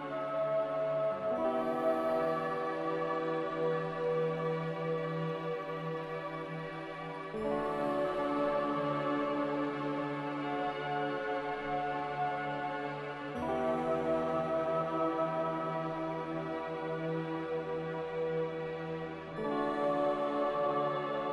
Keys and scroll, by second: 6.2 typing, 19.3 ctrl+z.